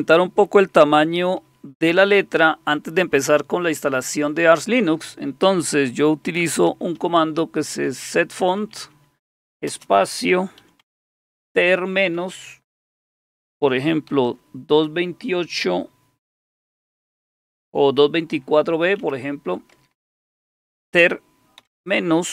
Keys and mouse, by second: 6.1-11.8 typing, 14.1 typing, 18.3-20.5 typing, 21.6 typing.